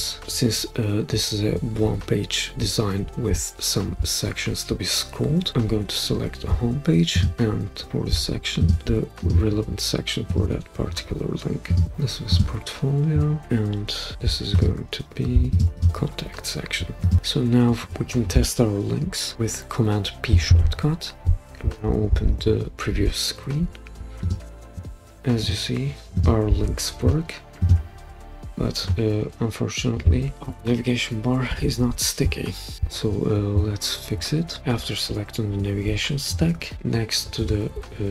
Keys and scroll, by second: 20.5 super+p, 31.5 Escape.